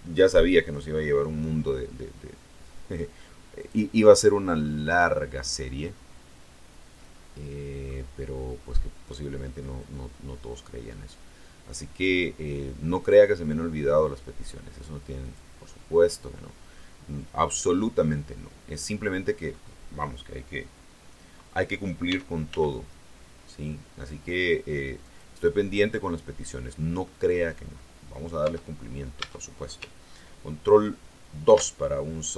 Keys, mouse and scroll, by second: 3.5 click, 4.6-8.0 middle drag, 9.7-13.2 drag, 15.1 click, 16.6-19.6 middle drag, 22.0 s, 22.4 x, 25.0 click, 25.4 middle click, 25.9 scroll up 2, 27.2 scroll up 2, 27.6 click, 28.3 Tab, 29.1 Tab, 31.4 ctrl+2.